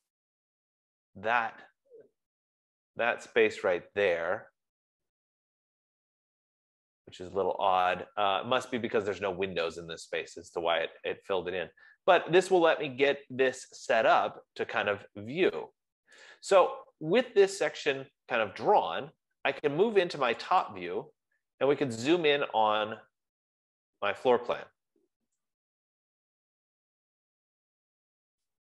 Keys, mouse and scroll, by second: 0.3 click, 4.5 F15, 6.8-8.3 scroll, 8.6-9.3 scroll, 13.0 scroll, 14.8-15.2 scroll, 16.9 right click, 20.8 click, 21.3 click, 23.1 scroll, 23.9-25.1 scroll, 25.1 scroll, 25.7-26.2 scroll, 26.8-27.3 scroll, 27.5-27.8 scroll.